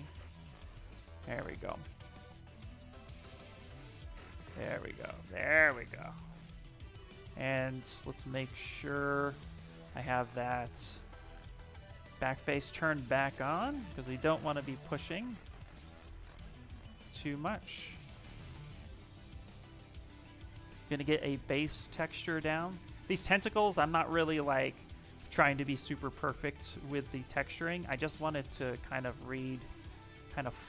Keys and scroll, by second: 0.9 space, 23.2 s.